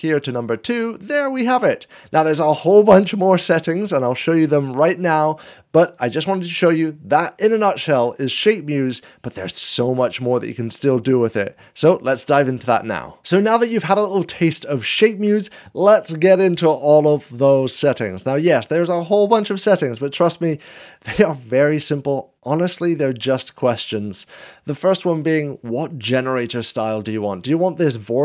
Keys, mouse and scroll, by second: 0.0-1.0 drag, 17.9 scroll down 1, 19.0 scroll down 1, 19.2 scroll up 1.